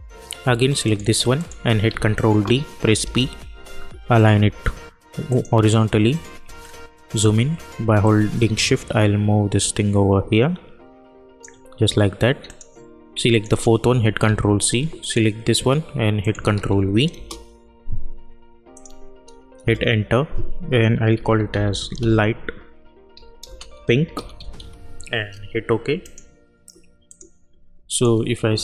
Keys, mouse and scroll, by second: 1.8 ctrl+d, 2.9 p, 5.2 click, 6.5-7.3 alt+scroll up 1, 8.3-9.9 shift+drag, 14.2 ctrl+c, 14.9 click, 16.5 ctrl+v, 17.2 Return, 18.7 click, 19.5 Return, 21.0-25.0 typing, 26.0 click.